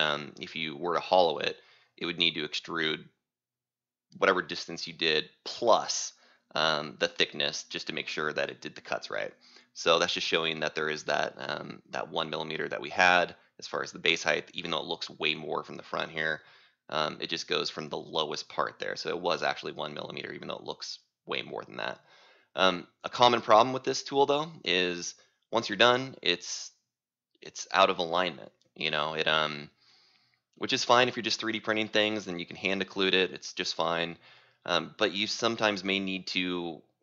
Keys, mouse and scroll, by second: 4.0-5.2 scroll, 5.2 c, 8.1 right click, 16.7 click, 17.8-18.9 scroll, 18.9-23.0 scroll, 23.0 t, 25.8 click.